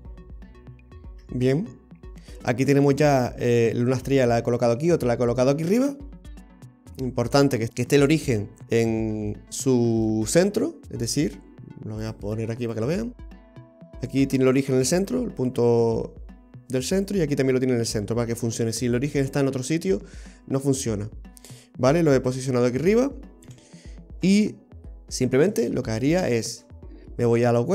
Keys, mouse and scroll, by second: 0.1 ctrl+z, 0.6 ctrl+z, 2.7 scroll up 1, 3.2-3.6 scroll down 1, 3.6 middle click, 6.9 middle click, 8.1 right click, 8.9 right click, 8.9-9.5 scroll down 1, 9.5 scroll down 1, 9.6 shift+middle click, 12.1 click, 14.0 right click, 17.0 right click, 18.5 scroll down 1, 18.8 middle click, 21.0-21.8 scroll down 2, 21.4 middle click, 23.5 KP_3, 24.1-24.4 scroll up 7, 24.9 shift+middle click, 26.1 click.